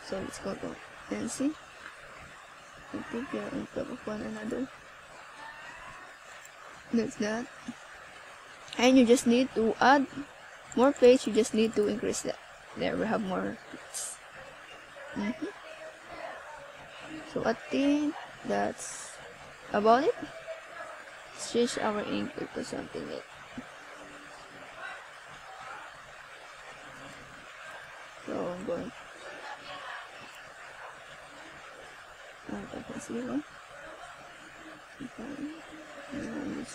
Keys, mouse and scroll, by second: 16.5 click, 21.3-22.0 scroll down 5, 24.2 click, 26.0 click, 29.2 click, 29.7 click, 32.5 click.